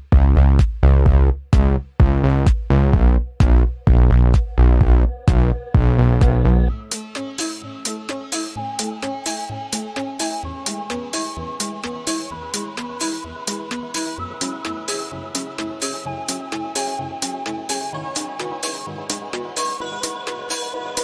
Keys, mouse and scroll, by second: 0.8 v, 1.0 click, 2.3-3.6 drag, 5.5 ctrl+w, 6.3 click, 8.0 click, 9.6 Right, 13.2 click, 19.9 click.